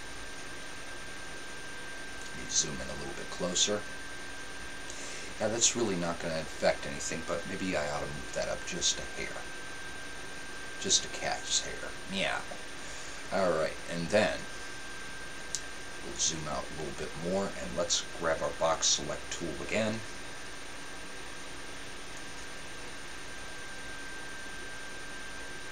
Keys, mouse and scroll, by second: 8.3 g, 13.3 a.